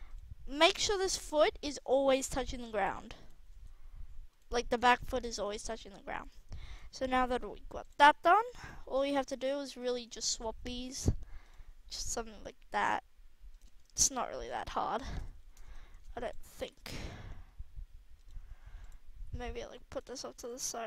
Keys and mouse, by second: 0.8 g, 1.7 r, 2.6 g, 3.5 g, 7.8-8.1 right drag, 8.2 middle drag, 8.5 middle click, 9.2 KP_3, 10.0 r, 12.3 r, 15.1 KP_1, 16.5 r, 18.8-19.1 drag, 19.1 r, 19.8-20.7 drag, 20.7 r.